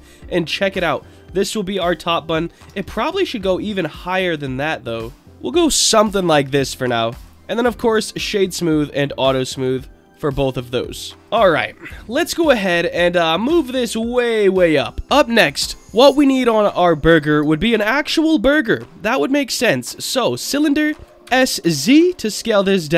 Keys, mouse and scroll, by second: 0.1-1.0 middle drag, 1.3 click, 1.7-2.3 middle drag, 2.6 Tab, 3.0 middle click, 3.9-5.2 drag, 5.2 middle click, 7.1 shift+click, 7.3-8.0 right drag, 9.5 click, 10.1 click, 11.2 click, 13.4-14.1 drag, 16.5-17.4 scroll up 2, 17.6 shift+a, 21.2 s, 21.6 z.